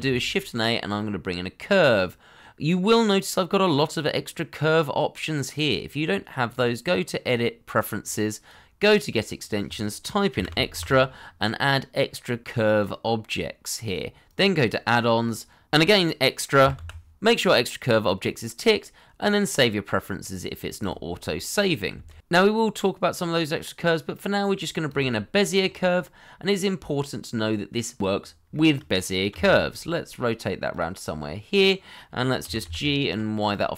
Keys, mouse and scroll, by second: 0.0 shift+a, 10.3 e, 10.5 x, 10.7 t, 14.5 double click, 16.8 x, 22.4 shift+a, 26.0 middle click, 28.5 shift+middle click, 29.3 r, 31.0 scroll down 1, 31.2 middle click, 32.2 scroll down 1, 32.4 g, 32.6 y.